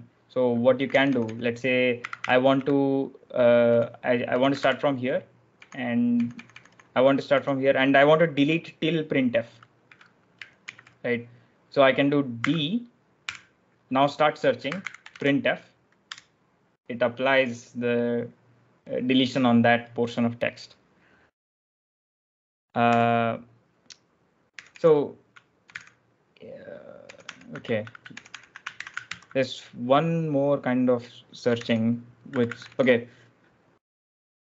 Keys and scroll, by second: 0.4-2.5 typing, 3.6-7.2 typing, 10.5 shift+6, 12.3-16.0 typing, 16.0 Return, 22.8 u, 24.5 j, 24.6 j, 25.5 ctrl+j, 27.0 ctrl+l, 27.2 ctrl+h, 27.7 Escape, 27.8-29.0 typing, 29.0 ctrl+j, 31.1-33.0 typing.